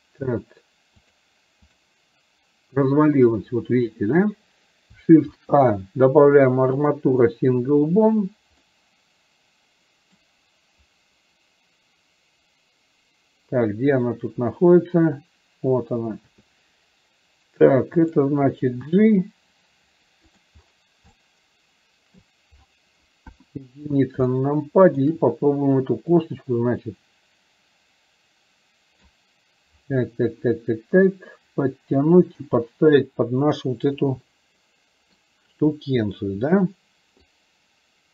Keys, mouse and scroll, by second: 1.0 click, 8.7-10.4 middle drag, 21.2-22.4 shift+middle drag, 24.4-25.1 shift+middle drag, 26.4-29.2 drag, 34.4-35.2 middle drag, 34.4 g, 37.4-38.1 drag.